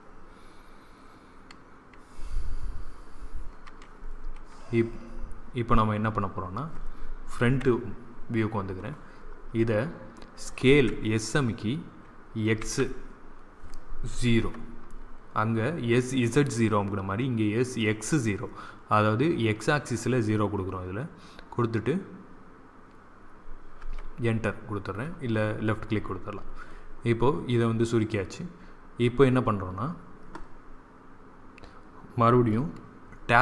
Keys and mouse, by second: 7.3 KP_1, 10.6 s.